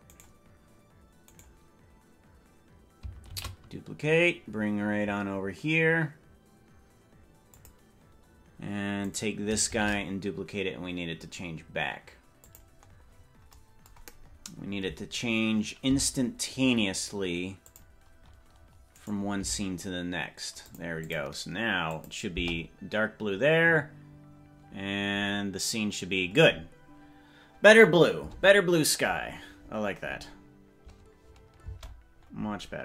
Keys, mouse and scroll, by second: 0.1 right click, 1.3 right click, 3.3 shift+d, 9.1 right click, 9.9 shift+d, 12.9-13.5 scroll up 12, 14.3-15.3 scroll up 8, 15.9 g, 19.0 right click, 19.4 g, 21.2 click, 22.0 click, 22.4 space, 31.8 space, 32.2 scroll up 1, 32.4-32.8 scroll down 32.